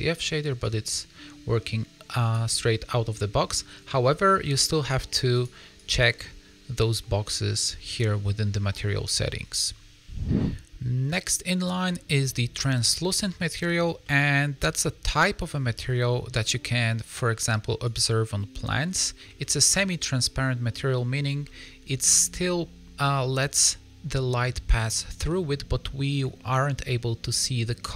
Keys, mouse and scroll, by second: 0.6 click, 5.3 click, 6.1 click, 7.8 click, 11.5 click, 12.6 middle click, 15.9 shift+middle click, 18.2 click, 18.7 middle click, 19.3 shift+middle click, 19.7 middle click, 21.4 middle click, 25.2 middle click, 27.2 middle click.